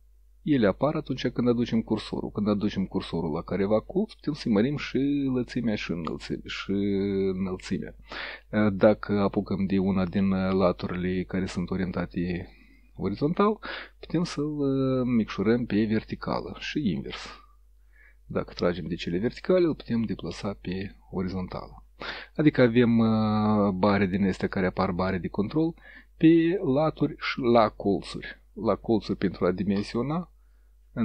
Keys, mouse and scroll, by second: 2.2-8.0 drag, 9.5-13.8 drag, 14.2-16.1 drag, 16.8-17.6 drag, 18.3-19.4 drag, 20.4 click, 25.8 click, 27.4-28.5 drag, 29.2-31.0 drag.